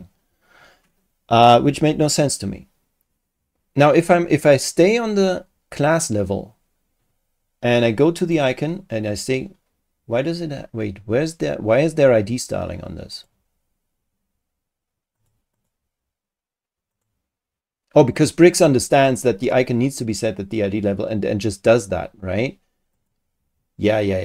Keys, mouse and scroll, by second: 8.2 click, 13.1 click, 15.2 click, 15.5 click, 16.9 click, 18.0 click, 22.9 click.